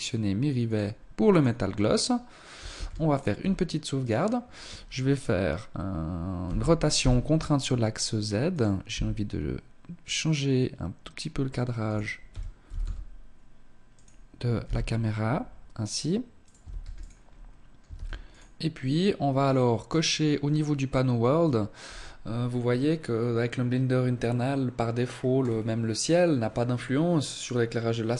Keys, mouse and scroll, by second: 1.7 ctrl+s, 2.4-3.0 scroll down 3, 3.0 right click, 5.4 r, 7.5 click, 7.9 g, 11.2 r, 13.6 g, 15.6 ctrl+s, 16.3 scroll up 2, 16.9 ctrl+s, 18.8 click, 20.1 scroll down 3, 24.1 scroll down 1, 24.3 scroll up 3, 26.5-27.3 scroll down 3.